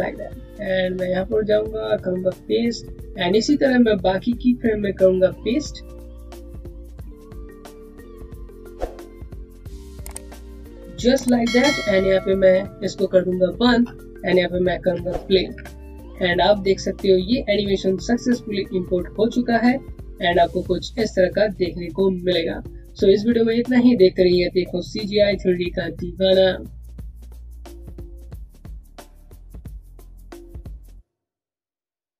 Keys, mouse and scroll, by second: 5.9 click, 10.2 click, 13.0 click, 15.4 alt+v.